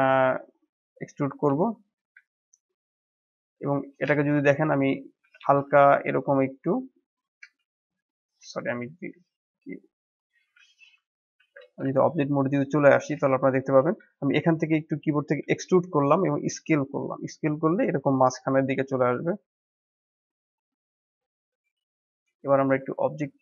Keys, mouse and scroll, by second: 1.4-5.2 shift+middle drag, 5.2 e, 10.3 ctrl+z, 11.3 shift+z, 11.9-15.3 shift+middle drag, 15.3 e, 21.2-23.4 middle drag.